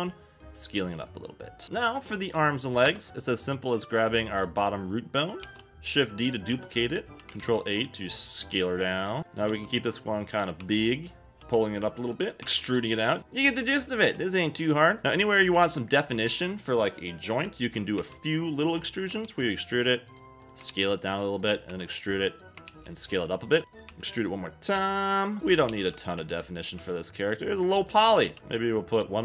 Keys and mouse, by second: 2.8 Tab, 4.5 click, 5.4 shift+d, 6.8 click, 7.2 s, 7.2 Escape, 7.4 ctrl+a, 9.2 click, 9.2 f, 9.2 g, 9.5 s, 9.9 click, 10.6 e, 11.3 g, 12.1 click, 12.4 e, 13.1 click, 13.2 ctrl+a, 13.2 s, 14.0 g, 14.9 click, 15.0 click, 15.4 g, 16.2 click, 18.0 e, 18.8 click, 19.2 ctrl+a, 20.1 click, 20.4 click, 20.7 ctrl+a, 21.4 click, 21.7 e, 22.3 click, 22.7 ctrl+a, 23.6 g, 23.9 e, 25.7 a, 25.8 a, 26.2 b, 26.8 g, 27.7 click, 27.9 a, 28.0 a, 28.2 b, 28.4 g.